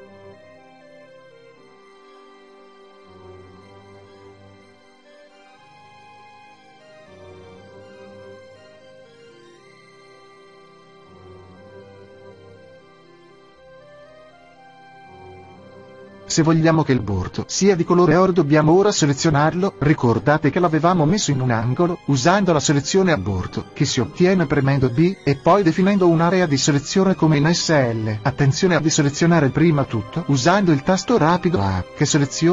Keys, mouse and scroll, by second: 0.3-2.3 middle drag, 3.8-5.8 middle drag, 6.7-8.6 right drag, 8.0 l, 9.4 r, 13.2-15.1 drag, 24.0-25.9 drag, 24.4 a, 25.7 b, 29.4 s.